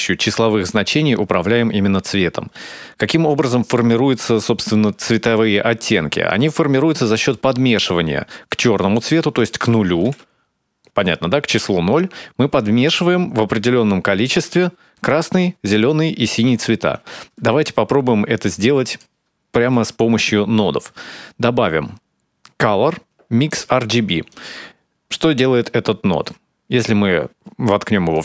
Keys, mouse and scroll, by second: 9.2 click, 17.2 middle click, 18.3 click, 19.5 shift+a, 26.6 click.